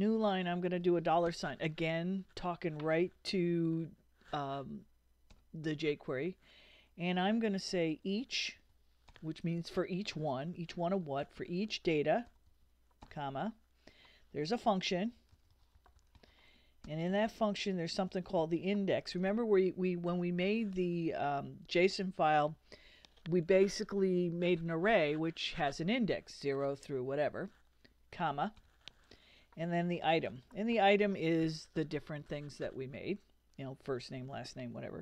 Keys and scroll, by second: 1.3 shift+4, 7.7-9.6 typing, 11.4-13.0 typing, 14.7-19.1 typing, 20.2 BackSpace, 20.5 d, 20.7 e, 21.9 x, 30.1-31.2 typing.